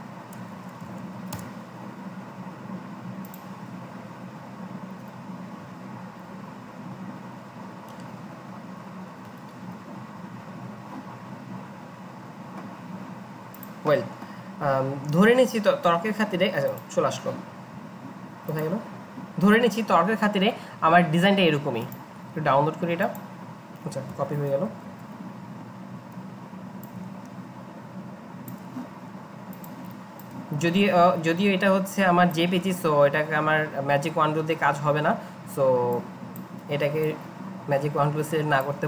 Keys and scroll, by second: 0.0-1.3 typing, 4.2 typing, 6.2 typing, 24.1 alt+Tab, 24.9 ctrl+v.